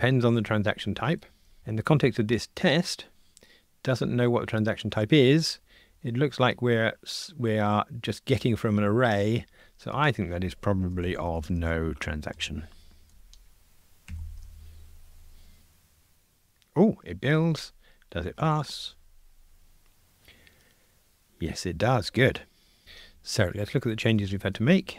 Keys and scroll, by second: 1.6 super+[, 12.4 Return, 14.1 super+F9, 18.3 ctrl+r, 24.1 super+k.